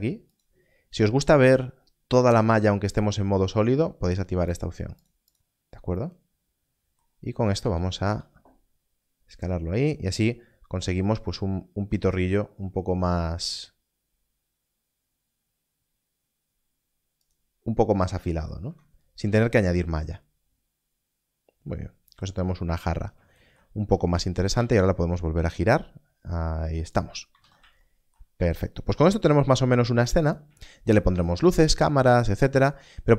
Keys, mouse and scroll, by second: 0.3 click, 4.5 click, 7.5 s, 12.5 y, 12.5-14.1 scroll up 1, 14.1-14.6 scroll down 1, 17.2 scroll down 1, 18.6 Tab, 18.8 scroll down 1, 22.6 scroll down 1, 24.4 r, 24.5 z, 26.8 z, 26.9 click, 27.3 alt+a, 30.2 click, 32.7-33.1 scroll up 1.